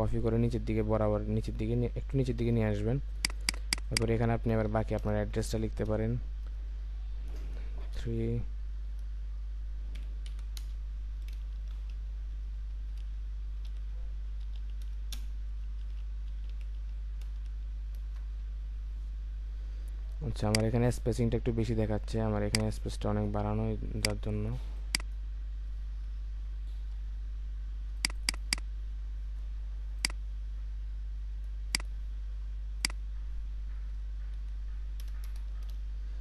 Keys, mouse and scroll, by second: 3.3 double click, 4.7 ctrl+a, 5.0 BackSpace, 7.9 typing, 10.1-11.6 typing, 13.0-14.6 typing, 15.8-17.4 typing, 18.0 Return, 26.2 Return, 28.2 double click, 33.8 Right, 34.4 Right, 35.0 BackSpace, 35.2 Return.